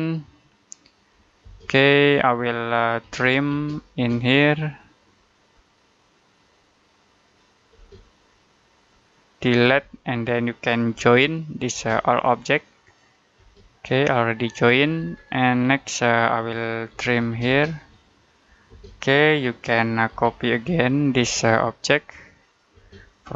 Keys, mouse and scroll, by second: 0.8 click, 2.1 middle click, 2.7-3.5 typing, 4.2 click, 7.6 space, 8.1 click, 9.5 Delete, 10.1 middle click, 10.8 j, 11.6 space, 12.1 click, 13.2 space, 13.9 click, 14.8 Escape, 15.3 middle click, 16.0 scroll up 1, 16.5-17.4 typing, 17.8 click, 18.6 space, 20.0-21.0 typing, 21.6 click, 22.6 space, 22.9 click, 23.2 scroll down 1.